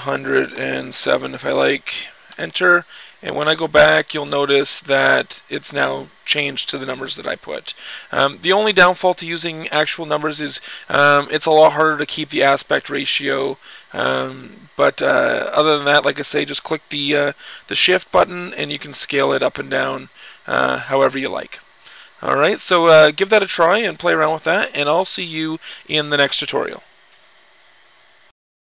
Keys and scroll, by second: 0.0-0.7 typing.